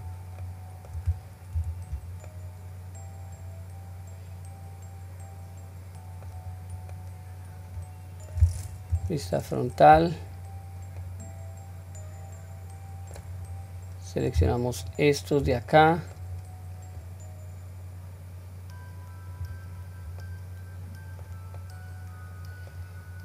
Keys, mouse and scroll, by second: 0.4 middle click, 1.5 q, 2.3-6.3 middle drag, 6.5-6.9 scroll down 1, 6.9-8.3 middle drag, 8.9 KP_1, 9.9-10.6 scroll up 2, 10.6-11.0 scroll down 1, 11.0-13.1 middle drag, 14.7 alt+click, 15.7 middle click, 17.0-19.4 drag, 19.8 scroll down 1, 20.3 middle click, 21.6-22.8 middle drag, 23.1 scroll down 1.